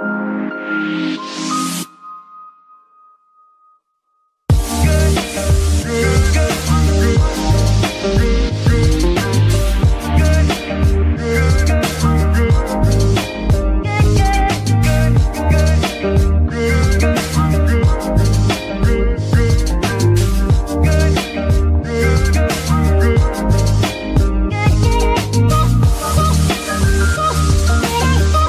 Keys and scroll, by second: 1.5 Escape, 2.3 g, 3.6 Escape, 6.0 g, 6.2 y, 7.8 Escape, 10.1 g, 10.3 y, 13.6 y, 13.8 Escape, 14.7 g, 15.6 Escape, 16.5 r, 17.7 Escape, 18.5 r, 21.0 Escape, 22.8 g, 23.7 r, 24.7 g, 25.6 r, 26.7 g, 27.6 r.